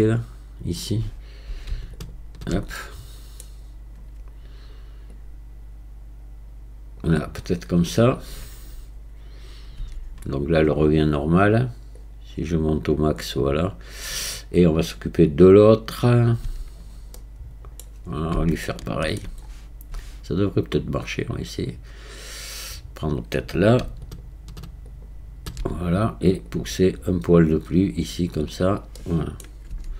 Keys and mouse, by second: 2.1 alt+click, 2.8 middle click, 5.2 click, 9.8 Tab, 12.0-13.9 drag, 16.5 Tab, 17.2 click, 17.3 middle click, 18.8 shift+middle click, 24.2 alt+click, 24.9 alt+click, 26.5 click, 29.0 middle click, 29.7 Tab.